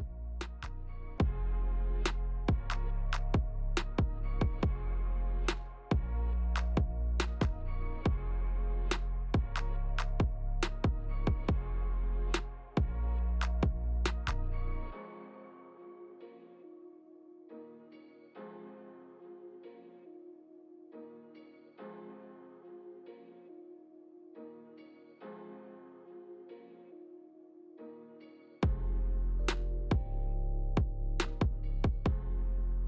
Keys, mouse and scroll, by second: 0.5 click, 2.6 g, 4.6 middle click, 5.5 shift+click, 5.9 click, 6.6 g, 8.2 middle click, 9.3 middle click, 10.7 Tab, 12.3 click, 12.9 click, 17.4 click, 17.9 Tab, 18.2 middle click, 19.7 click, 20.7 click, 22.1 middle click, 22.8 shift+middle click, 23.8-25.0 scroll down 2, 24.3 click, 25.3 middle click, 26.6 scroll down 2, 26.9 middle click, 27.3 Tab, 27.6 scroll up 4, 27.9 scroll down 2, 28.3 shift+middle click, 28.7 scroll down 1, 28.9 shift+middle click, 29.8 right click, 30.5 click, 30.8 middle click, 31.5 scroll down 1, 31.7 shift+middle click, 32.3 ctrl+s, 32.3 click, 32.5 click, 32.7 shift+d.